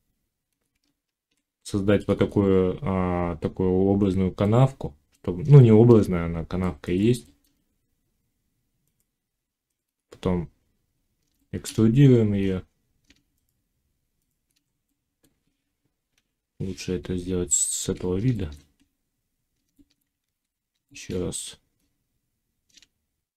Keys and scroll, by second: 0.6 Tab, 16.0 1, 20.1 ctrl+z.